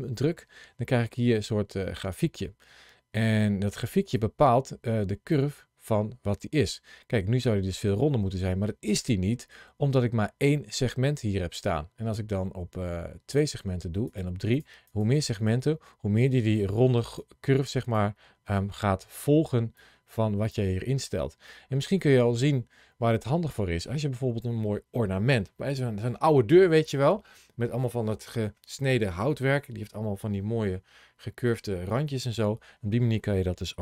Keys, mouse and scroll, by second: 0.0 click, 4.0 click, 13.2 click, 13.9 click, 19.6 click.